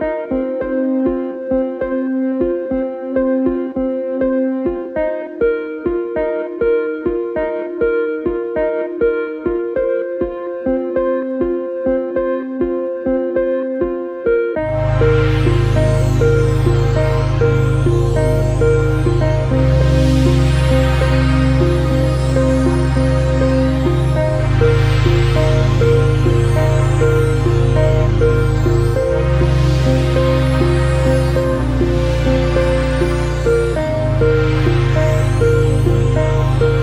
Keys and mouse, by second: 0.5 click, 8.3 click, 12.0 click, 31.1 click.